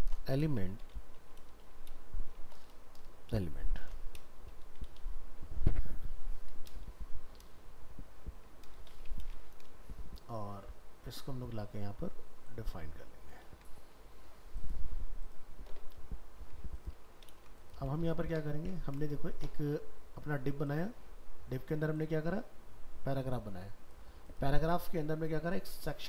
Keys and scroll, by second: 9.2 ctrl+c, 13.4 ctrl+v, 17.3 ctrl+c, 17.7 ctrl+a.